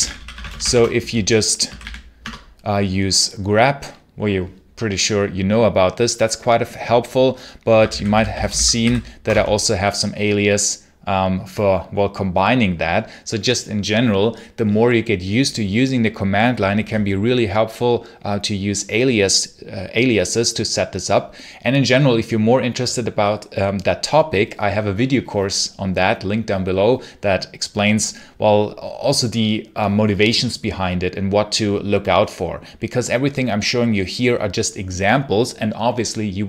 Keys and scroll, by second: 0.0-2.2 typing, 7.4-9.2 typing.